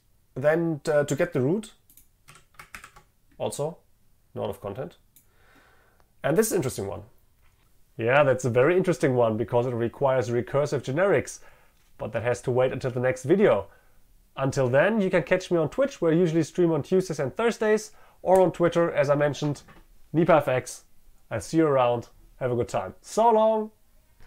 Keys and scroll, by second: 2.8 ctrl+v.